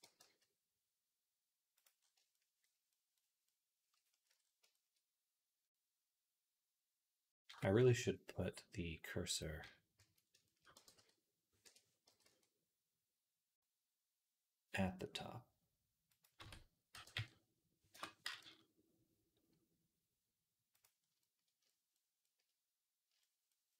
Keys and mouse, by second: 4.1 Tab, 7.8 Tab, 7.8-9.8 right drag, 9.8 a, 10.6 g, 11.9 g, 16.2 Tab, 16.8 g, 18.1 g, 22.1-23.7 shift+middle drag.